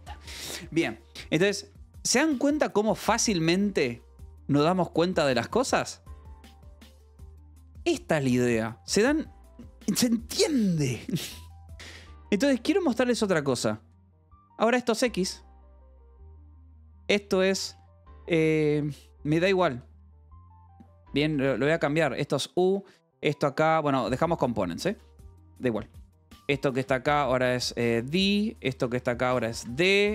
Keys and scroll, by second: 1.8 k, 3.0 k, 3.4 j, 3.9 k, 5.6 j, 7.4 k, 8.9 j, 9.4 k, 12.7 h, 13.8-30.1 typing, 15.1 Escape, 18.7 Escape.